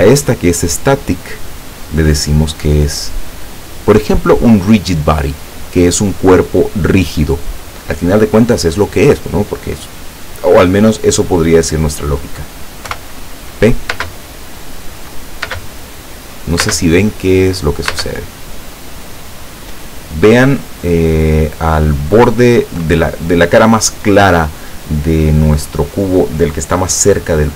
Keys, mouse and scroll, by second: 2.5 click, 5.5 click, 11.7 click, 12.9 p, 14.1 space, 15.5 space, 16.7 space, 18.0 space.